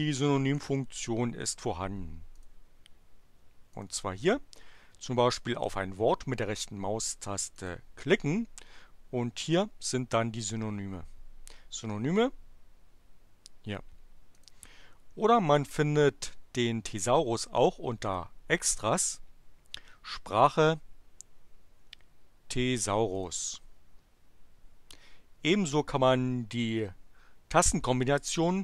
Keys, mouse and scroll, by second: 2.3 click, 3.7 click, 7.5 right click, 14.3 click, 18.0 click, 23.0 click, 26.5 click.